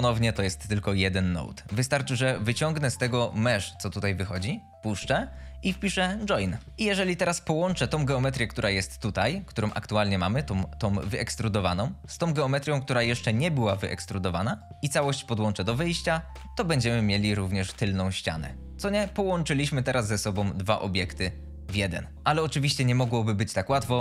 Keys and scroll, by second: 6.1 o, 6.5 i, 6.7 Return.